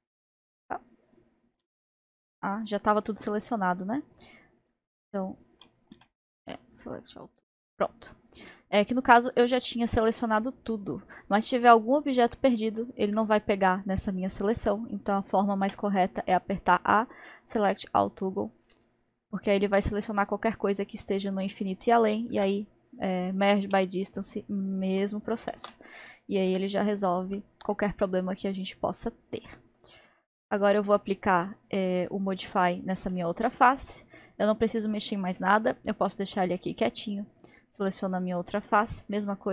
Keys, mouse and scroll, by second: 0.6 click, 2.2 a, 6.0 a, 9.5 click, 12.9-13.9 drag, 14.5 click, 15.7 a, 18.3-18.7 scroll down 2, 18.7-22.4 middle drag, 22.4 m, 24.3 click, 26.5 Tab, 26.9 scroll, 26.9-27.7 scroll up 3, 27.7-29.1 middle drag, 29.1 scroll, 29.1-29.4 scroll down 1, 29.4-35.8 middle drag, 35.8-37.2 drag, 39.1-39.5 drag.